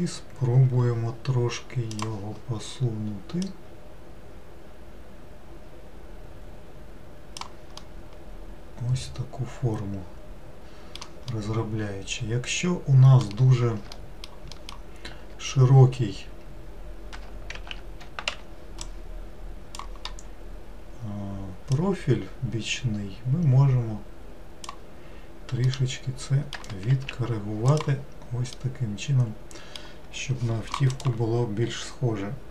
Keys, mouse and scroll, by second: 2.0-3.9 drag, 7.8-10.9 middle drag, 11.4-14.0 middle drag, 14.6 alt+middle click, 17.6 alt+z, 18.4 1, 18.9-22.2 drag, 25.7-26.9 middle drag, 26.9 alt+z, 27.7 click, 28.6-31.7 middle drag.